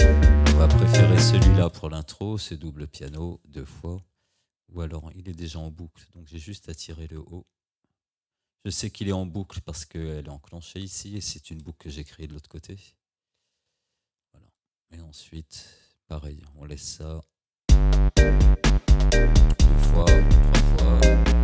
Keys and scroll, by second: 1.6 space, 17.7 space.